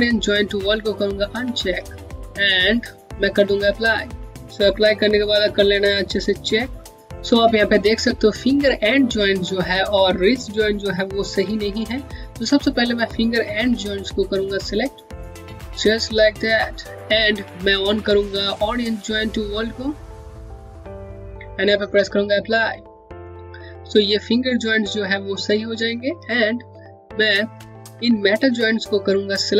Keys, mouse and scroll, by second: 1.1 click, 3.3 click, 4.3 scroll up 1, 5.0-5.5 scroll down 1, 5.5 click, 14.5 click, 15.0 shift+click, 16.3 shift+click, 19.8 click, 26.6 click, 26.9-27.3 scroll up 1, 27.8 middle click.